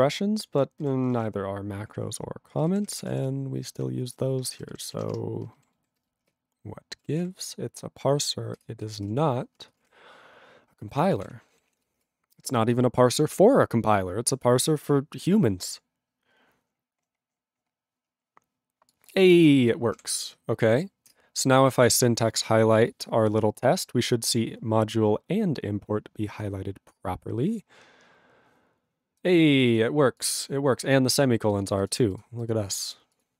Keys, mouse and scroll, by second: 1.1 ctrl+o, 1.1 ctrl+y, 2.6 ctrl+k, 2.6 ctrl+p, 3.1 ctrl+e, 4.5 ,, 4.8 ctrl+n, 4.9 ctrl+e, 5.2 BackSpace, 5.8 ctrl+s, 9.1 ctrl+s, 9.8 ctrl+space, 9.8 ctrl+a, 9.9 ctrl+p, 10.5 ctrl+p, 11.2 ctrl+g, 11.2 ctrl+e, 11.7 ctrl+s.